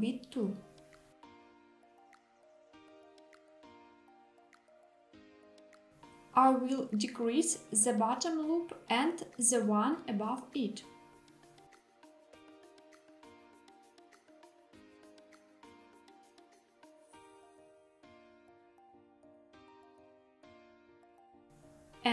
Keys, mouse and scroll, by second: 3.2 click, 4.1 KP_1, 5.6 alt+z, 6.5-7.6 drag, 8.8 s, 11.9 click, 12.3 click, 12.5 click, 13.2 s, 17.4 click, 18.4 middle click, 18.9 alt+z, 19.4-21.5 middle drag, 21.5 click.